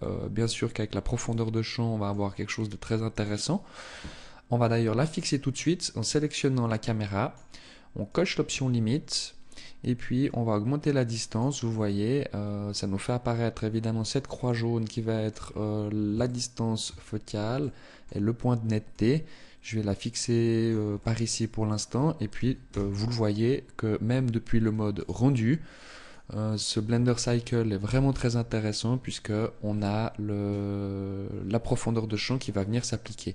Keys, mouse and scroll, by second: 2.6 right click, 5.0 click, 6.2 click, 7.6 click, 9.8 click, 11.2 middle click, 14.0 middle click, 15.1-15.7 scroll up 2, 15.8 shift+middle click, 16.6 scroll up 1, 17.1 middle click, 18.4 click, 20.6 middle click, 22.2 KP_0, 23.4-23.8 scroll up 1, 24.4 click, 27.2 n.